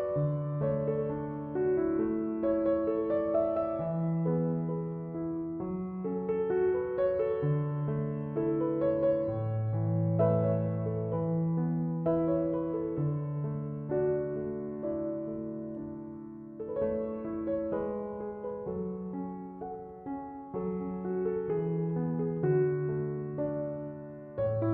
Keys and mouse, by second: 0.5 right click, 2.0-17.6 drag, 19.1 typing, 20.7 click.